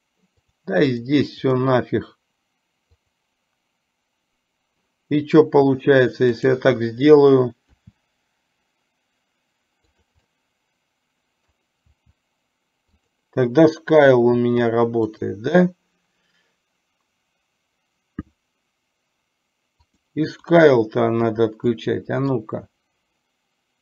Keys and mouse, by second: 0.5 click, 1.0 drag, 1.5 click, 3.1 click, 6.5 click, 7.9 r, 10.2-11.5 middle drag, 12.0 r, 15.4 click, 20.0 click, 20.4 click, 21.9-22.4 middle drag.